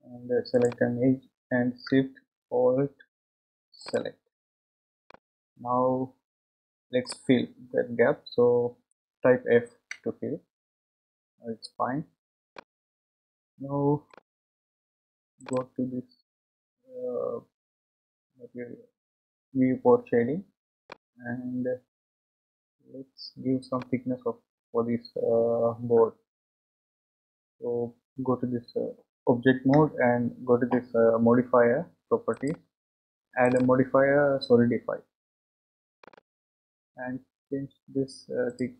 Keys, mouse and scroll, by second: 3.8 alt+shift+click, 5.1-8.1 middle drag, 9.9 f, 12.0-12.5 scroll down 2, 12.5-15.4 middle drag, 15.4 click, 20.4-20.9 scroll down 2, 20.9-23.9 middle drag, 30.0 Tab, 32.4 click, 33.5 click, 36.3 click, 38.5-38.7 drag.